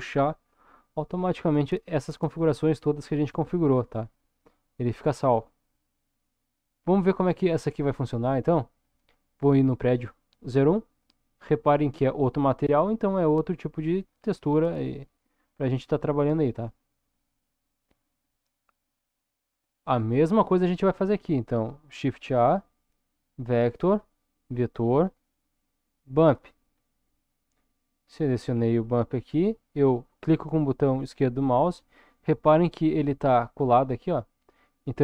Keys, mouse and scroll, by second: 9.8 click, 11.6-13.1 middle drag, 14.0 click, 15.1 click, 17.0 click, 17.8 click, 20.9 click, 22.2 shift+a.